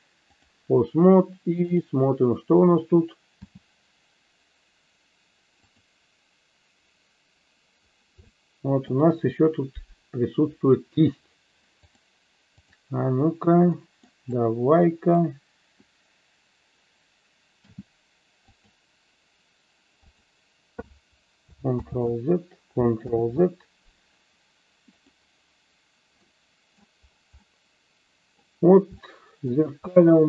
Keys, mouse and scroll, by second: 2.6 click, 3.5 g, 5.6 click, 8.3-8.9 shift+middle drag, 11.7 click, 13.7 middle click, 14.4 click, 17.6 g, 18.5 click, 20.0 click, 21.8 ctrl+z, 25.0 click, 26.2 middle click, 27.4-28.5 middle drag, 29.0 shift+middle click, 30.0 middle click.